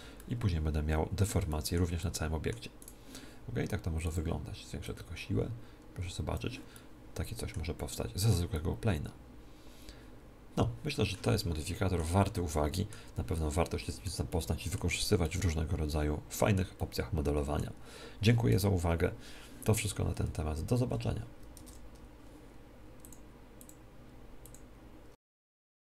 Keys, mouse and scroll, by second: 0.1 middle click, 1.4-3.9 middle drag, 2.7-6.5 drag, 3.9 right click, 6.7 middle click, 10.1 middle click, 11.2-18.6 middle drag.